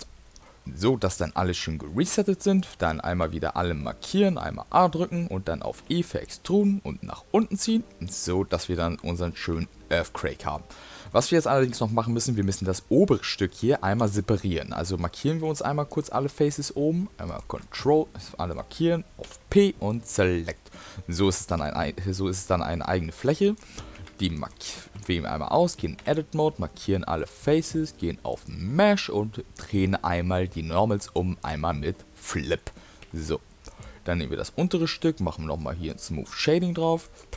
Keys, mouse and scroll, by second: 0.2 middle click, 1.2 middle click, 1.9 middle click, 2.6 click, 3.1 a, 3.8 middle click, 4.4 middle click, 5.8 e, 8.6 middle click, 9.1 middle click, 9.6 Tab, 9.9 middle click, 10.8 middle click, 11.6 middle click, 11.7 Tab, 12.2 middle click, 13.0 shift+middle click, 13.3 middle click, 13.7 shift+middle click, 14.2 middle click, 15.9 click, 17.3 ctrl+click, 18.1 middle click, 19.2 p, 20.6 middle click, 21.2 middle click, 21.6 q, 22.8 middle click, 23.4 click, 24.0 Tab, 24.4 click, 25.0 Tab, 26.1 a, 26.8 middle click, 28.3 click, 32.2 middle click, 33.1 Tab, 33.7 click, 34.8 right click, 36.5 middle click, 37.0 click.